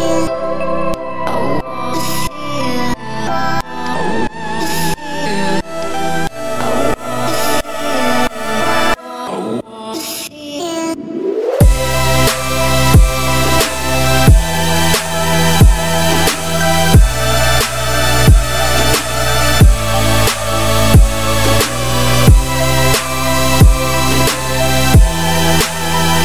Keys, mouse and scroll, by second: 0.6 z, 1.1 z, 2.7 click, 3.1 shift+middle click, 3.2-3.7 scroll up 4, 3.7-4.5 shift+middle drag, 4.5 click, 5.6-7.4 drag, 7.4-7.8 scroll down 4, 7.8 middle drag, 8.0-8.4 scroll up 2, 8.4 shift+middle drag, 8.7-9.0 scroll up 3, 9.4 click, 10.3-11.4 drag, 11.4-11.8 scroll down 5, 11.8-12.3 shift+middle drag, 12.3 scroll up 4, 12.9 shift+middle drag, 13.1-13.7 scroll up 3, 13.7 click, 14.7-16.0 drag, 16.0-16.3 scroll down 1, 16.9 click, 17.8-19.8 drag, 20.6-22.2 drag, 23.3 click, 23.5 scroll down 3, 23.7-25.2 middle drag, 25.2 ctrl+s, 25.6 click.